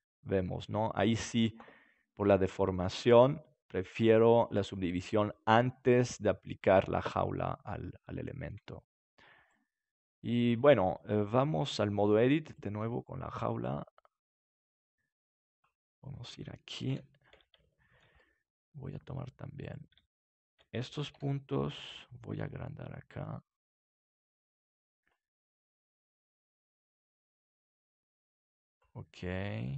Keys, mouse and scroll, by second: 2.1-4.0 middle drag, 7.3-9.6 middle drag, 9.6-11.7 right drag, 10.8 Tab, 11.7 middle click, 12.5-14.5 right drag, 13.3-15.4 drag, 16.0 middle click, 16.8 KP_7, 19.6 right click, 21.1 KP_7, 22.2 s, 24.7-27.5 drag, 29.0 middle click.